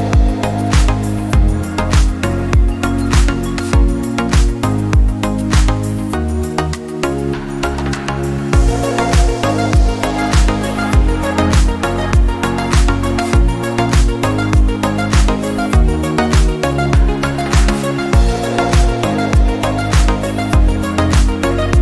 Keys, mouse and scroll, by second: 1.9-3.6 drag, 4.3 KP_3, 4.7 click, 5.5-6.1 scroll down 1, 6.1 r, 8.7-9.8 shift+middle drag, 9.8 Tab, 10.5 alt+z, 10.6 click, 10.9 click, 11.8 x, 13.7-14.3 scroll down 3, 14.3-15.5 shift+middle drag, 15.5 e, 21.3 middle click.